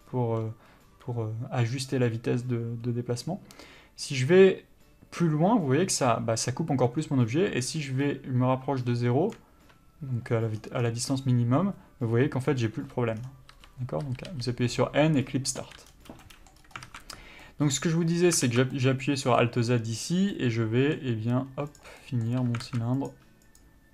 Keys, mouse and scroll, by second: 10.8-11.3 scroll down 1, 11.3 scroll up 1, 12.6 scroll down 1, 13.0 n, 13.4-13.7 scroll down 1, 13.7 n, 16.1-16.5 scroll down 1, 16.5 middle click, 16.8 scroll up 1, 17.1 alt+a, 17.6 middle click, 18.6 alt+z, 18.9 middle click, 21.9 click, 22.2 middle click, 22.9 alt+a, 23.2 click.